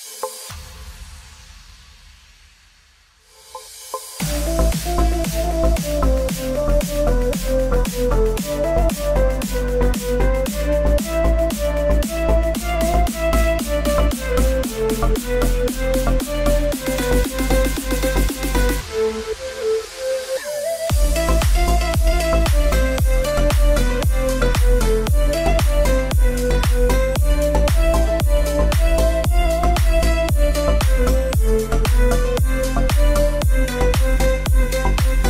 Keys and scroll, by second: 10.5 Return, 17.9-20.6 typing.